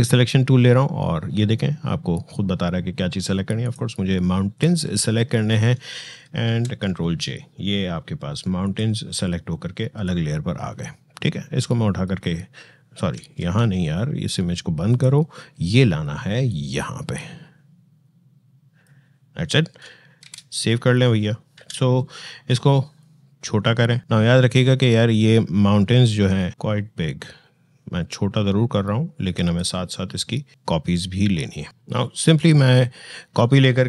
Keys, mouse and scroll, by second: 3.4 click, 6.3 ctrl+j, 8.4-13.2 drag, 13.2 ctrl+z, 14.7-20.0 drag, 20.0 ctrl+s, 22.8 click, 31.7-33.8 drag.